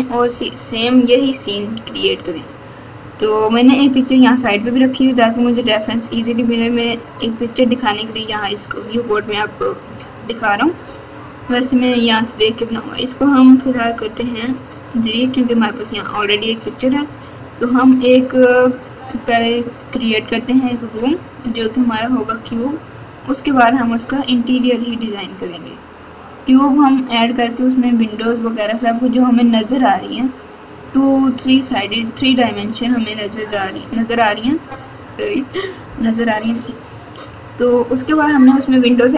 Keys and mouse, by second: 6.6 click, 13.8 x.